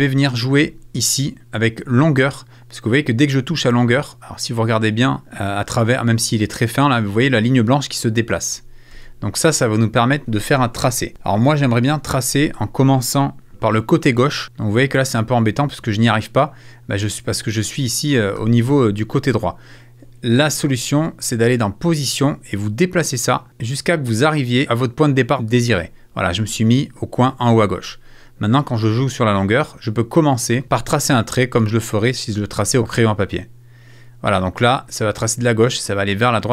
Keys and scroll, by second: 8.9 super+z.